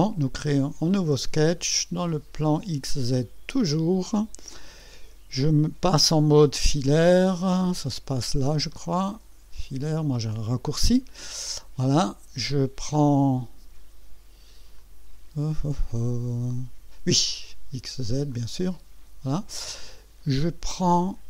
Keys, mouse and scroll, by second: 1.0 click, 3.2 click, 7.7 click, 8.7 click, 10.0 click, 11.2 scroll up 2, 14.7 click, 18.3 click.